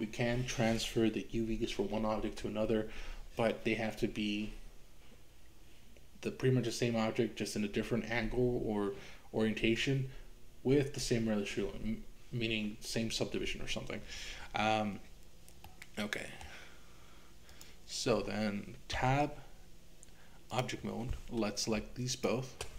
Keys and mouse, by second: 15.7 middle click, 17.5 click, 19.0 Tab, 22.1 shift+click.